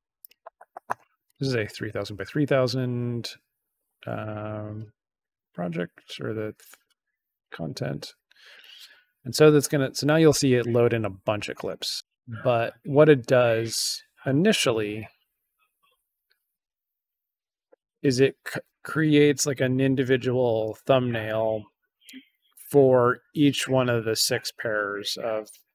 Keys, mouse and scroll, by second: 1.2 click, 4.1 click, 7.3 click.